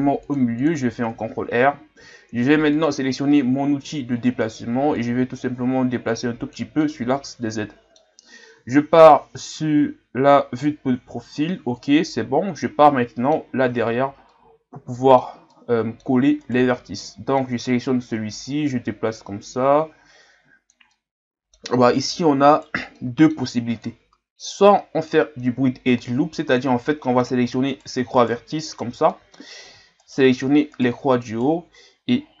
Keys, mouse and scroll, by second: 2.7-6.8 drag, 6.8-8.8 middle drag, 8.8 KP_3, 10.9 KP_3, 12.9 middle click, 13.5-14.3 scroll up 5, 14.3-16.4 middle drag, 16.4 right click, 16.7-17.9 middle drag, 17.9-18.5 scroll up 2, 18.5-20.9 drag, 20.9-22.5 middle drag, 22.5 right click, 22.9 middle click, 23.8-26.9 drag, 26.9 middle click, 27.7-29.1 right drag, 29.1 middle click, 30.0-32.4 shift+right drag.